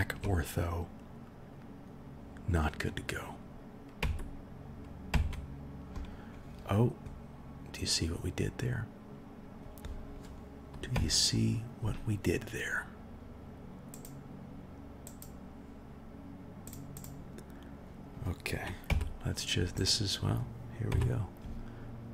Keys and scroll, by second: 4.0 KP_1, 5.1 KP_1, 10.9 KP_1, 18.8 KP_1, 20.9 KP_1.